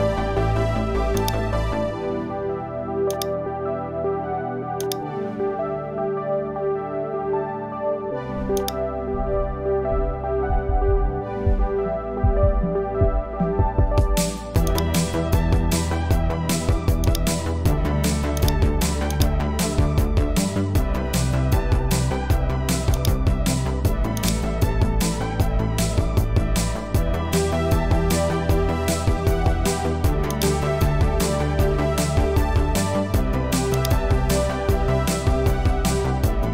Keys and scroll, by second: 9.6 super+e, 10.9 super+j, 27.3 Return.